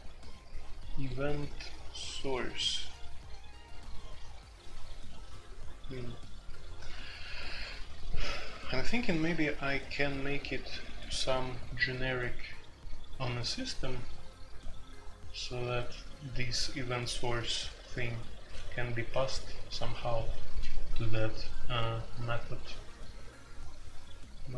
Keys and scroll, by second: 0.3 k, 0.5 j.